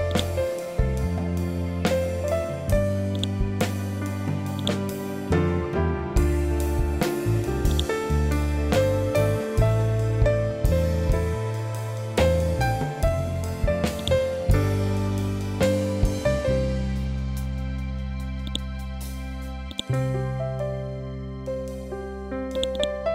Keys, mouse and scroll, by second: 0.0-3.0 drag, 3.0 right click, 4.5 click, 9.1 scroll up 1, 11.3 scroll down 1, 13.3-13.9 scroll up 1, 13.9 click, 18.4 click, 19.6 right click, 22.4 click.